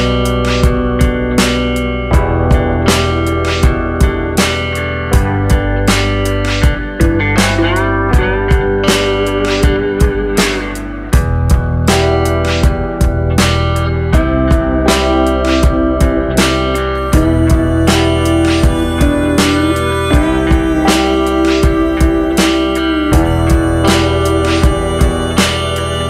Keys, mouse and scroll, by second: 0.2 click, 0.5 click, 0.9 click, 1.6 click, 2.1 click, 4.1 r, 6.7 g, 8.3 click, 8.7 click, 9.0 click, 9.3 click, 9.8 click, 10.6 click, 11.5 r, 12.4 s, 13.2 g, 14.0 r, 15.1 click, 15.9 s, 17.2 click, 17.8 s, 18.5 g, 19.9-20.7 scroll down 5, 20.2 middle click, 21.0-21.4 scroll up 4, 21.4 scroll down 1, 21.5 scroll down 2, 21.8-22.6 scroll up 2, 22.3 r.